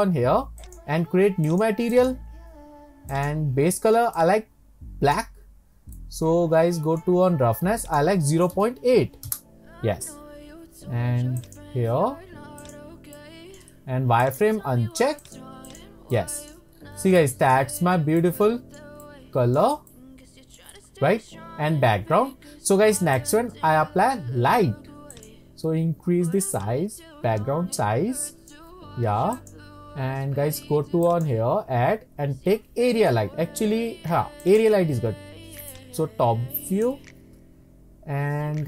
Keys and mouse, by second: 0.6 click, 1.5 click, 2.0 drag, 3.2 click, 6.1 click, 7.8-10.1 drag, 11.6 click, 12.6 click, 13.2-13.6 middle drag, 14.4-15.5 drag, 15.7 click, 16.1-16.5 shift+middle drag, 16.5 shift+click, 17.2 middle drag, 17.3 click, 18.3-18.7 shift+middle drag, 18.7 shift+click, 18.7 shift+middle click, 19.1-19.6 middle drag, 19.9 shift+click, 20.1-20.7 shift+middle drag, 22.7 middle drag, 23.2 click, 25.2 click, 26.6-28.6 drag, 29.3 click, 31.2-31.9 drag, 31.9-32.7 right drag, 32.7-34.7 drag, 35.7-36.8 drag.